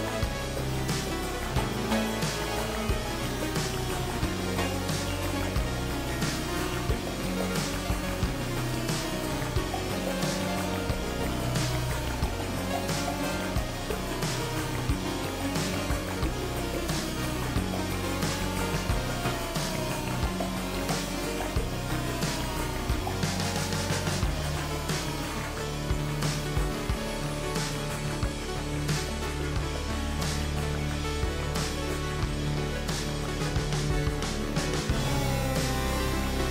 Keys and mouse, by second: 1.0 shift+middle click, 4.0 shift+middle click, 22.6 alt+z, 23.0-25.3 middle drag, 26.9 alt+click, 28.2 KP_3, 32.8 shift+click, 35.3 w.